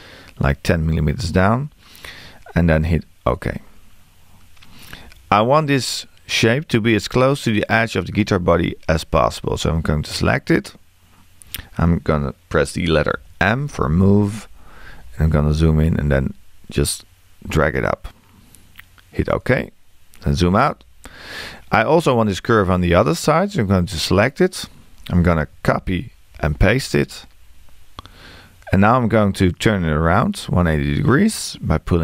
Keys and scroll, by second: 13.2 m.